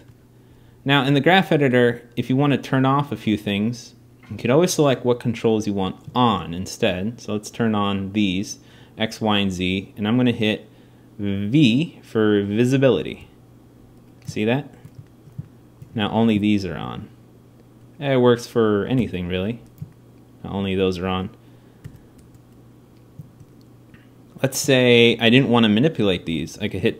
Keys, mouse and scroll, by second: 4.4-6.0 drag.